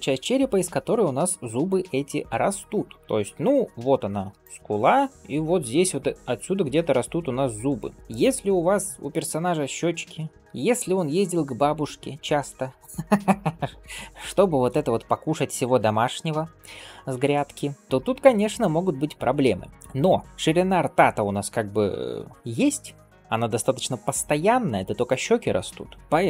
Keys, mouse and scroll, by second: 4.3-7.9 drag, 7.9 d, 19.8 right click, 20.2 d, 26.0 scroll up 1.